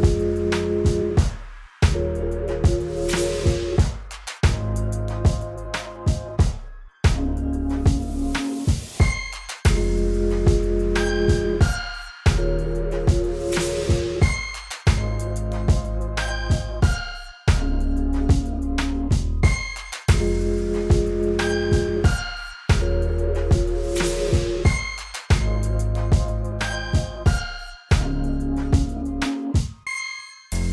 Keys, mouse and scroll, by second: 18.9-24.2 drag, 26.7 click.